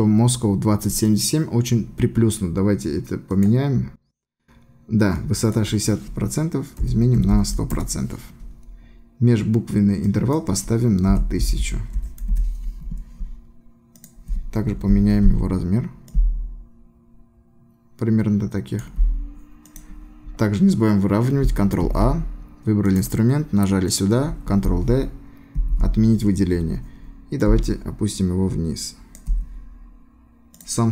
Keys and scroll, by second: 7.8 Return, 12.4 Return, 14.7 ctrl+t, 21.9 ctrl+a, 25.6 ctrl+d.